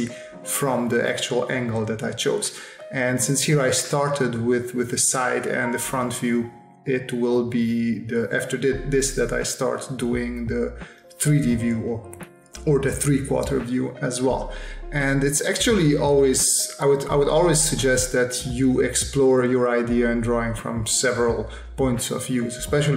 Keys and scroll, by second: 1.3 space, 2.8 space, 4.8 space, 10.0 space, 11.5 s, 15.3 space, 16.4 space, 21.4 v, 22.0 s.